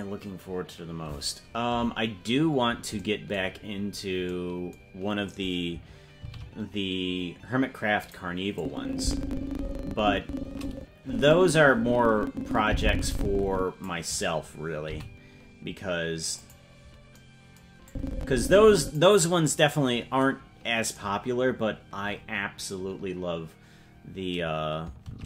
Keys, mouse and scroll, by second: 3.5-4.2 scroll down 8, 6.2 shift+d, 8.5-13.8 drag, 14.8 g, 17.8-18.9 drag, 25.0 shift+d.